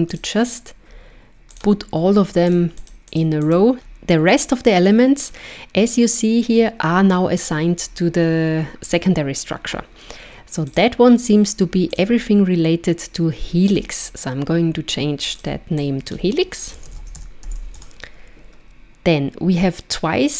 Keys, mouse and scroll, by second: 0.1 click, 1.6 click, 2.7 click, 2.8 click, 3.1 click, 3.7 click, 3.8 scroll down 2, 10.7 click, 12.0 click, 15.3 click, 15.4 click.